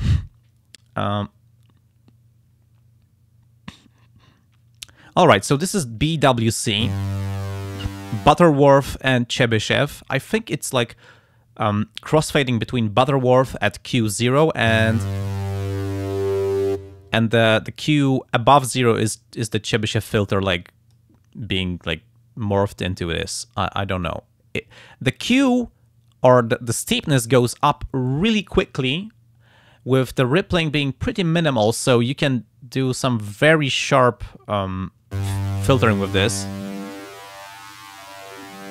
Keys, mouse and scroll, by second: 15.0-16.8 drag, 19.3 click, 20.3 click, 21.6-23.5 drag, 24.0-26.5 drag, 36.5-38.7 drag.